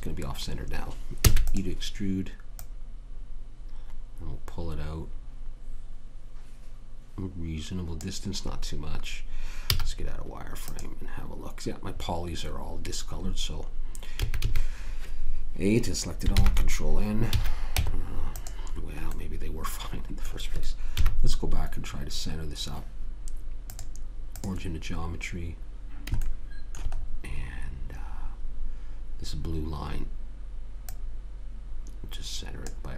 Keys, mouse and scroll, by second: 1.6 e, 2.9 click, 10.1 z, 14.6 a, 14.8 a, 16.7 ctrl+n, 17.7 a, 18.1 Tab, 19.5-20.8 middle drag, 21.3 KP_1, 24.0 click, 24.7 click, 26.5 middle click, 31.2 click.